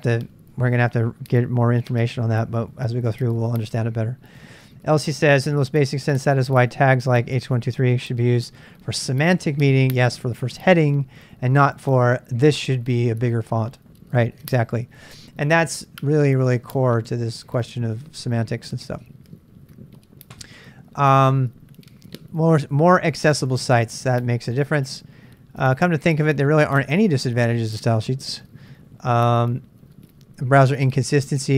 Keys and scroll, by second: 17.0 super+Tab, 29.7 j, 30.5 j.